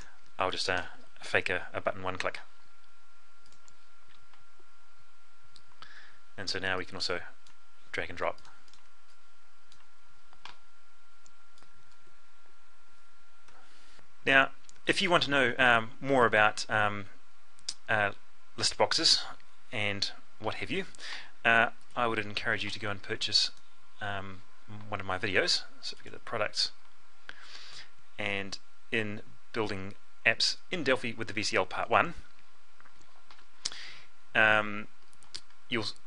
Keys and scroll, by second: 13.0 F12.